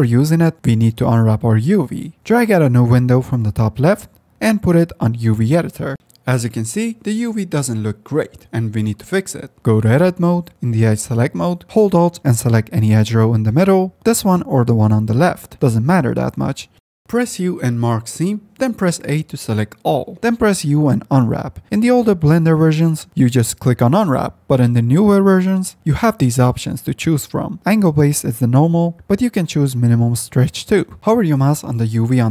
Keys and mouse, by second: 0.1 Tab, 0.6-1.1 drag, 4.4-5.8 drag, 6.2 F10, 6.6 Tab, 7.0 a, 9.2 2, 9.8 F10, 10.9 click, 11.4 Tab, 11.7 a, 12.7 2, 13.7 alt+click, 17.1 u, 18.7 F10, 19.5 a, 20.7 u, 31.9 click.